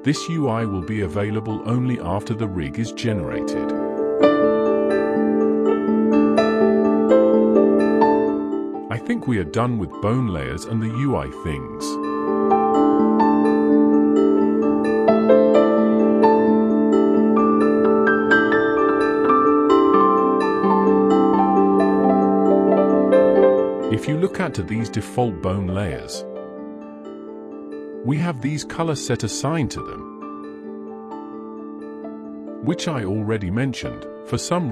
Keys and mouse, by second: 1.5 click, 2.0 click, 2.9 click, 19.0 middle click, 19.8 ctrl+Tab, 20.6 alt+a, 21.2 click, 21.5-22.0 middle drag, 28.3-29.6 drag, 31.4 click.